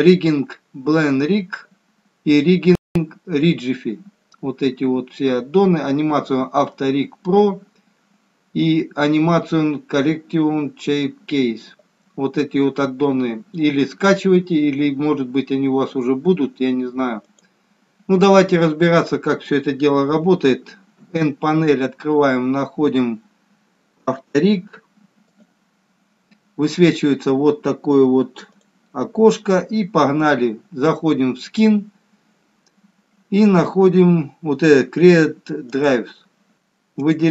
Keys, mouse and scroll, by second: 21.1 n, 25.3 click, 35.8 click, 37.0 click.